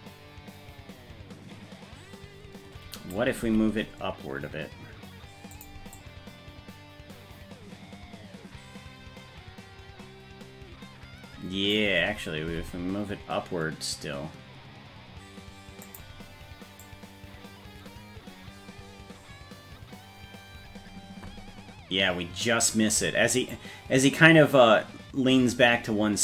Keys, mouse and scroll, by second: 5.9-11.8 drag, 16.8-22.6 drag, 23.5-26.2 drag.